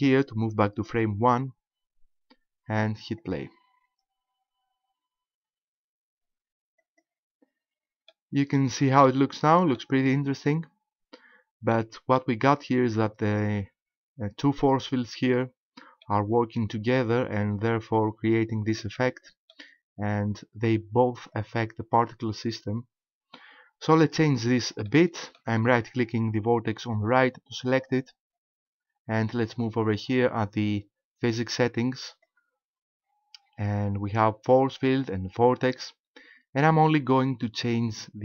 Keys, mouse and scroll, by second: 0.9 click, 3.2 click, 6.8 click, 8.1 shift+middle click, 9.1 middle click, 10.0-10.4 scroll up 4, 10.9 scroll up 1, 11.7 shift+middle click, 12.7-13.0 scroll down 2, 16.1 middle click, 17.5 scroll down 1, 18.8 middle click, 24.9 middle click, 27.1 right click, 32.1 click.